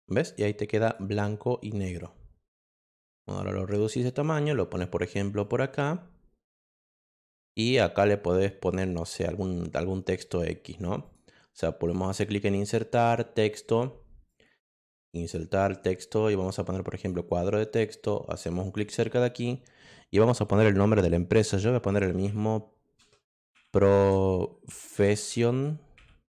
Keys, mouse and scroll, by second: 0.3 click, 2.0-3.3 drag, 3.7-5.1 drag, 5.4-6.7 drag, 11.0 click, 11.9 click, 12.9 click, 15.2 click, 16.9 click, 18.6 click, 21.6-25.9 typing.